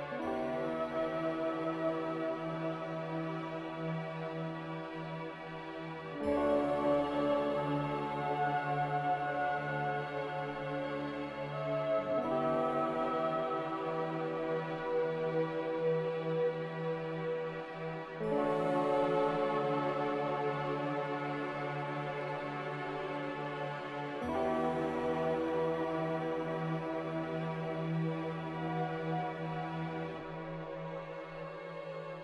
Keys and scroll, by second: 1.1 m, 4.8 3, 5.0 Return.